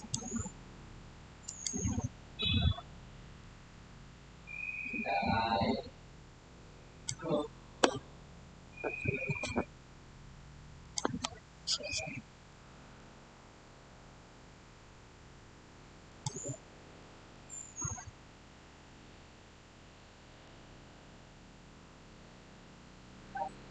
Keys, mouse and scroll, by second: 10.7 click, 12.4 middle click, 12.6-13.0 scroll down 1, 13.3-15.0 scroll up 1, 16.0 click, 16.9-19.5 middle drag, 19.9 middle click, 20.0 scroll down 1, 22.5 scroll up 1.